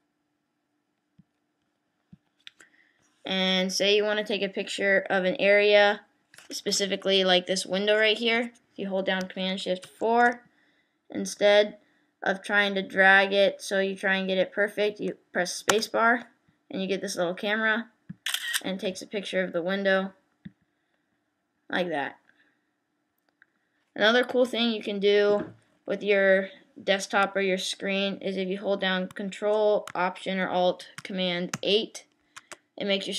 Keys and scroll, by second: 9.8 shift+super+4, 31.5 ctrl+alt+super+8.